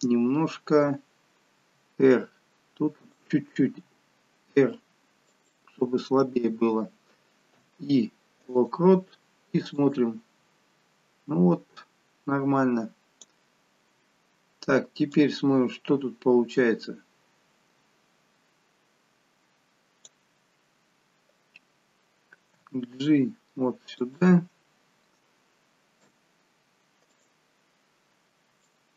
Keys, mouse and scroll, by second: 1.6 r, 3.5 g, 7.4 i, 9.7 click, 15.1 click, 22.4 g, 26.0 i, 28.6 click.